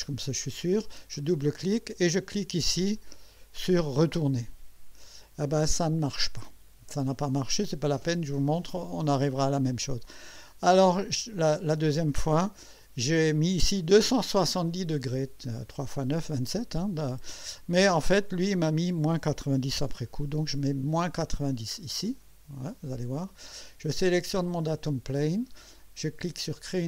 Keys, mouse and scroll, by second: 1.1 click, 3.0-3.6 drag, 4.1 click, 7.7 click, 18.4 click, 19.7 -, 22.1 click, 23.2 click, 24.5 click, 26.7 click.